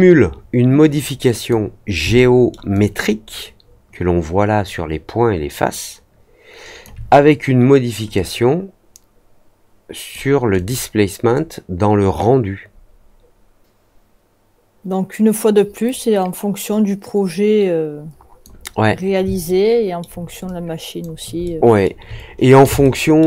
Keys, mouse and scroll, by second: 0.8 click, 2.1-2.4 alt+middle drag, 2.7-6.8 alt+drag, 8.1-10.0 drag, 10.5 click, 11.3-18.4 drag, 19.4-19.9 alt+middle drag, 20.4-20.9 alt+drag, 21.4-21.8 alt+middle drag, 22.8-23.1 alt+middle drag.